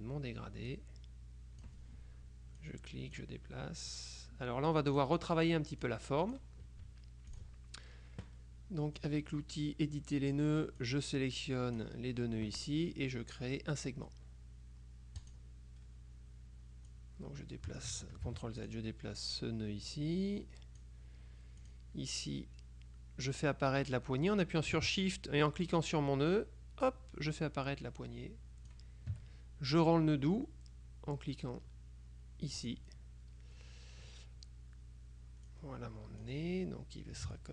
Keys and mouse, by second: 0.8-2.2 drag, 2.7-3.8 drag, 4.0-5.6 drag, 5.9-7.0 drag, 7.4 click, 9.1-10.9 drag, 15.3 click, 17.0-18.4 drag, 18.4 ctrl+z, 18.7 ctrl+click, 19.4-21.4 drag, 21.7 click, 25.8-29.3 shift+drag, 32.7 click, 35.6-36.8 drag, 37.4-37.5 ctrl+shift+drag.